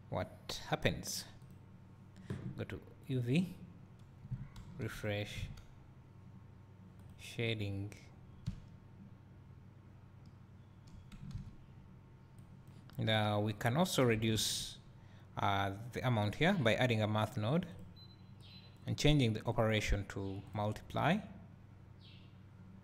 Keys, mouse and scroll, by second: 1.4 click, 7.5 click, 12.3-13.5 drag, 17.7 click, 18.4 click, 19.5-22.8 drag.